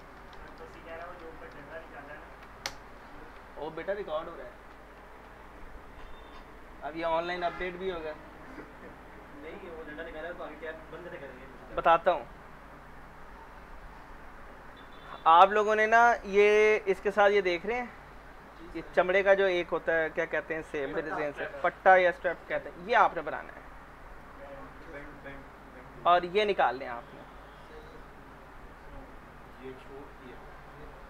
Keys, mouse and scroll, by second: 0.0-2.1 typing, 2.3 Down, 2.6 Return, 12.9 click, 16.0 click, 20.5-21.8 scroll down 1, 21.8 click, 23.6-24.1 scroll down 1, 24.1 click, 25.1-25.6 scroll up 1, 27.7 right click, 29.4 click.